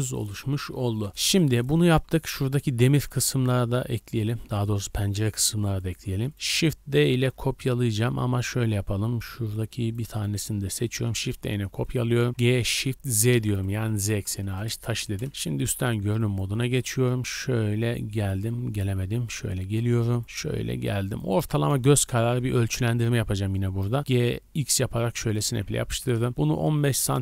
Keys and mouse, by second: 1.5 shift+middle click, 2.0 click, 3.1-4.5 middle drag, 4.6 middle click, 5.7-7.9 middle drag, 10.2 shift+click, 11.1 shift+d, 12.3 g, 13.9 r, 15.3 KP_7, 15.6 z, 17.0 g, 17.7 g, 18.8 g, 20.7-21.6 shift+drag, 21.9 shift+click, 23.0 KP_7, 24.0 g, 24.3 middle click, 24.9-27.2 ctrl+drag, 26.0 g.